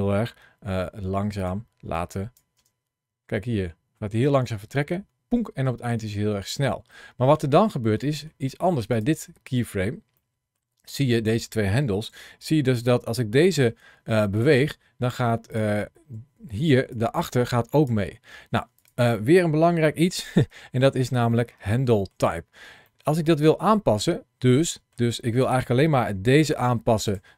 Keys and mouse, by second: 1.2 click, 1.8 click, 2.4 space, 6.4 space, 6.8 middle click, 7.9 middle click, 8.8 click, 10.0 middle click, 11.0 click, 11.9 g, 14.2 click, 15.3 click, 16.6 ctrl+shift+a, 16.6 shift+c, 20.3 KP_Decimal, 21.8 shift+middle click, 22.7 shift+middle click, 23.6 shift+middle click, 24.5 middle click, 25.9 g, 26.9 click.